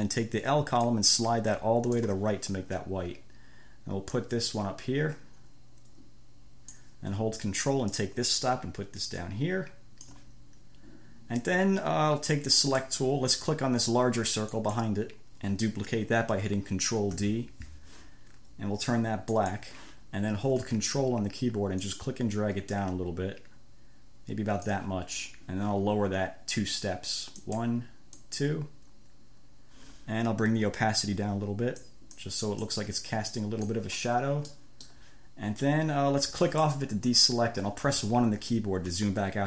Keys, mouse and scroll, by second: 1.1-2.5 drag, 4.4-7.2 drag, 8.2-10.6 ctrl+drag, 12.8 click, 14.8 click, 17.4 ctrl+d, 19.6 click, 22.0-25.2 ctrl+drag, 27.6-28.8 drag, 31.3 click, 32.4 click, 33.5 click, 34.8 click, 36.7 click, 39.2 1.